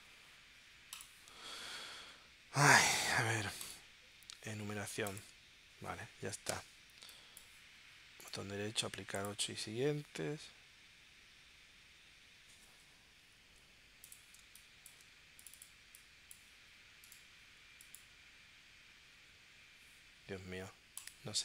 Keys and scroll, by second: 14.4 space.